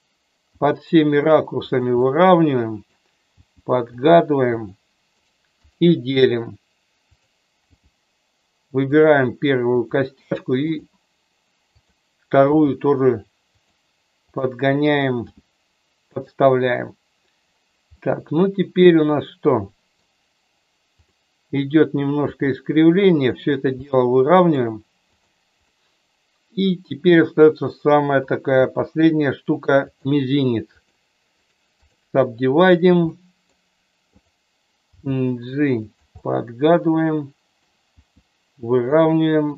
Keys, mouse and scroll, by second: 0.6 g, 1.7 click, 2.0-3.0 middle drag, 3.3 g, 3.9 click, 4.4 click, 5.3 right click, 7.6 g, 8.9 click, 9.8 click, 10.2 right click, 11.7 click, 12.4 g, 13.6 click, 14.3 click, 15.2 g, 16.0 click, 17.9-20.1 middle drag, 20.9 click, 22.2 g, 23.3 click, 23.8 middle click, 25.1 click, 25.6-26.6 middle drag, 28.6 e, 29.7 click, 30.7 click, 31.4 right click, 33.1 middle click, 34.1 click, 34.8 g, 35.8 click, 36.2-37.5 middle drag, 37.9 g, 38.7 click, 39.4 click.